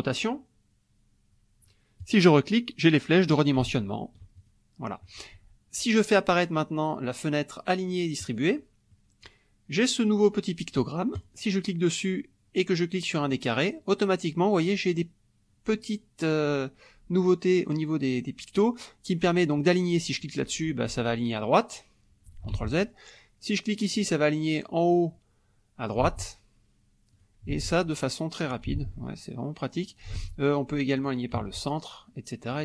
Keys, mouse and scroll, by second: 2.0 click, 3.4-4.6 ctrl+drag, 8.2 click, 8.9 middle click, 11.2 click, 13.2 click, 20.1 click, 22.5 ctrl+z, 23.9 click, 26.1 ctrl+z, 27.1 click, 27.5 ctrl+z, 28.4 click, 28.8 ctrl+z, 29.7 click, 30.1 ctrl+z, 30.9 click, 31.4 ctrl+z, 32.5 click.